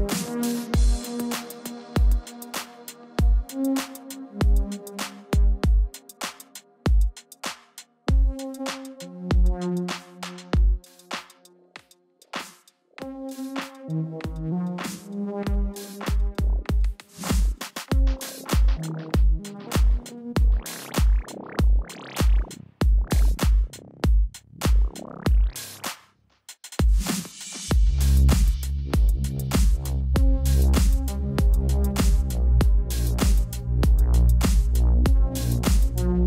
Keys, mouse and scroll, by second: 1.5 click, 3.4 click, 4.6 ctrl+t, 6.1 t, 6.1 right click, 7.1 click, 9.9 Return, 12.4 Return, 12.4 click, 13.8 click, 16.8 click, 18.2 space, 18.6 click, 27.5 alt+click, 28.5 click, 32.5 ctrl+t, 32.9 click, 34.3 Return, 34.8 v.